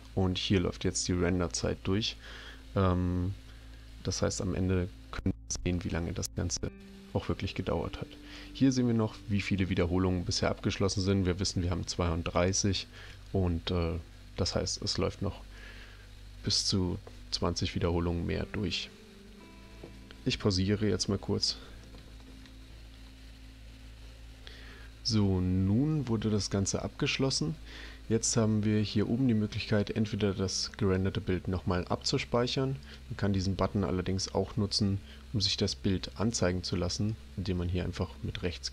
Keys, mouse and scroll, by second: 32.8 click, 36.9 right click.